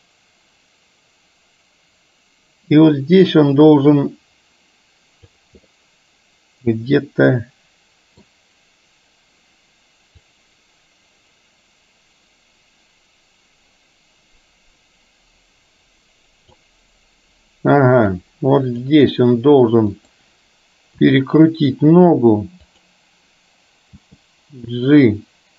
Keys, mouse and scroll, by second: 5.7-8.2 middle drag, 10.3-16.7 drag, 18.2 click, 20.1 click, 21.1 r, 24.0 g.